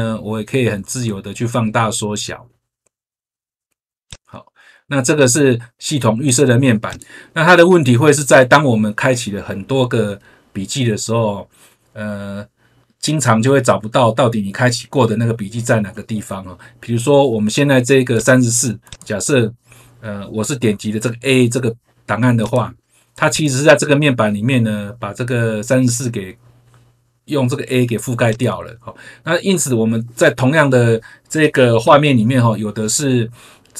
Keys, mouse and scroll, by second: 4.0 click, 6.8 click, 18.1 click, 18.8 click, 22.3 click, 23.2 click, 28.2 click.